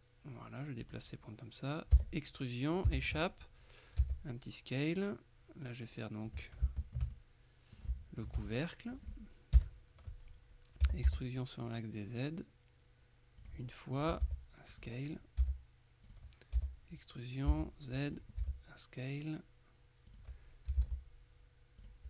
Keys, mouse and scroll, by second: 0.9 click, 2.1 e, 2.9 Escape, 4.1 s, 6.4 click, 7.2 shift+middle click, 8.0 shift+middle click, 8.6 shift+middle click, 9.6 KP_1, 10.9 e, 11.2 z, 13.5 click, 14.3 s, 14.8 click, 15.5 s, 16.1 click, 16.7 e, 17.6 z, 18.2 click, 18.5 s, 20.2 click, 20.5-21.4 typing, 21.9 click.